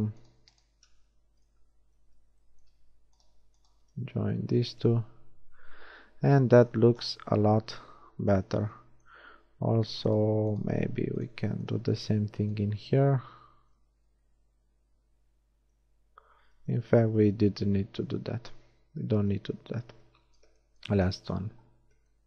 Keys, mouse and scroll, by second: 2.0 shift+j, 4.0 j, 4.4 a, 5.0 Tab, 7.7 Tab, 10.8 w, 13.8 j, 14.3 Tab, 15.9 Tab, 16.9 ctrl+z, 17.1 ctrl+z, 17.5 ctrl+z, 18.1 ctrl+z, 19.2 ctrl+z, 19.7 a, 20.3 Tab, 21.1 Tab.